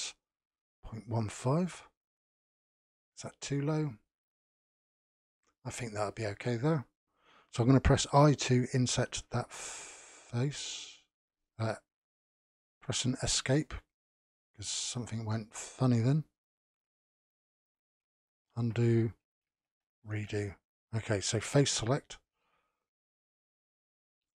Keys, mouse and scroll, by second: 3.1-5.7 middle drag, 5.7-6.1 scroll up 1, 6.1-8.1 shift+middle drag, 14.3-17.3 middle drag, 18.1 ctrl+z, 20.0 ctrl+shift+z, 21.6 3, 22.1-24.1 middle drag, 24.1 click.